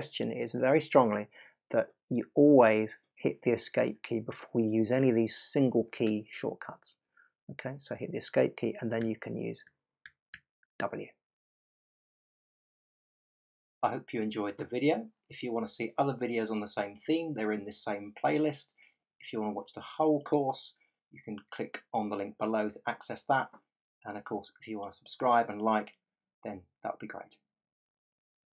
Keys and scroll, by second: 9.0 w.